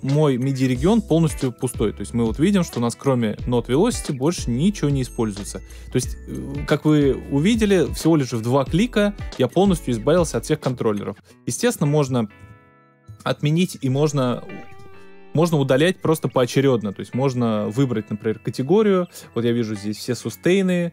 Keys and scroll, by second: 12.4 super+z.